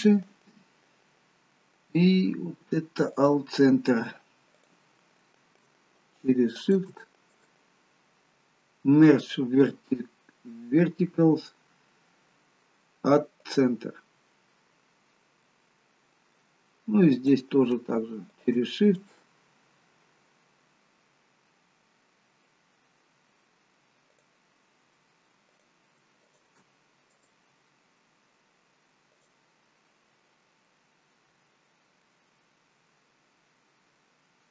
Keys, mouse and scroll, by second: 4.7 click, 6.7 shift+click, 7.4 right click, 15.5 middle click, 17.2 click, 18.4 shift+click, 19.1 right click, 25.6 click, 26.4 shift+click, 27.2 right click, 30.3-30.8 scroll down 2, 30.8 middle click, 31.8 scroll down 1, 32.1 middle click.